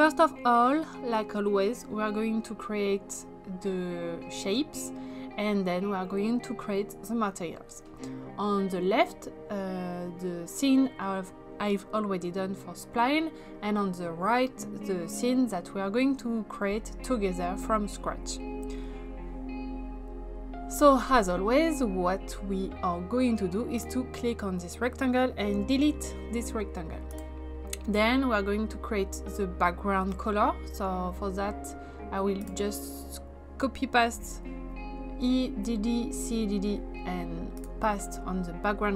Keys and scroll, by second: 25.5 Delete, 34.2 ctrl+c.